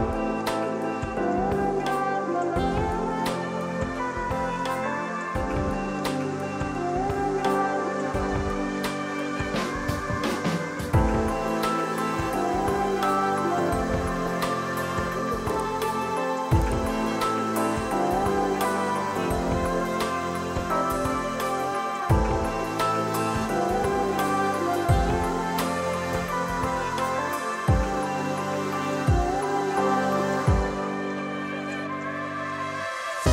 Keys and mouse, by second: 0.5 click, 1.9 Return, 3.1 click, 8.5 click, 10.2 click, 11.1 x, 11.2 click, 14.0 shift+click, 14.4 KP_1, 14.5 Return, 15.3 click, 21.1 Delete, 22.9 click, 23.6 right click, 24.0 click, 29.0 right click, 29.3 click, 30.6 i, 31.6 Return, 32.8 click, 33.0 ctrl+click.